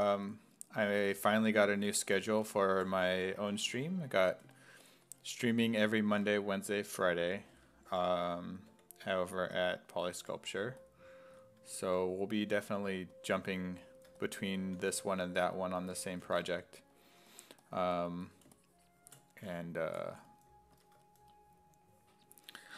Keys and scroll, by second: 0.3 s, 2.1-3.9 typing, 7.5 s, 7.9 5, 8.7 5, 10.0 s, 10.2 5, 11.3 s, 11.9 1, 14.5-16.9 typing, 20.7 s.